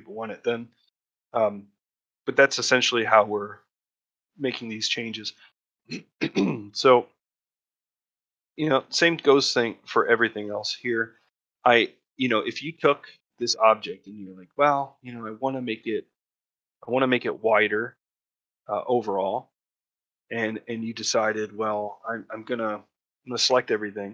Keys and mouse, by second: 1.6 middle click, 2.0 shift+middle click, 3.5 middle click, 4.1 middle click, 5.0 middle click, 5.6 middle click, 6.3 ctrl+middle click, 6.7 shift+middle click, 8.3 middle click, 8.9 shift+middle click, 10.3 shift+middle click, 10.7 middle click, 11.5 middle click, 15.1 middle click, 20.0 shift+middle click, 20.8 shift+middle click, 22.8 middle click, 23.3 a, 23.9-24.1 middle drag.